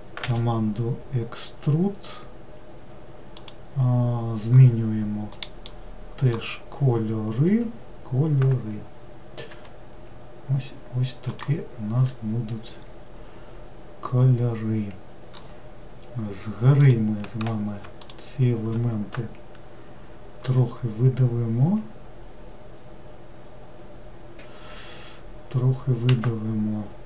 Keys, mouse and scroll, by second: 0.2 e, 5.3-8.5 middle drag, 9.5 g, 16.8 click, 18.0 shift+click, 20.4 e.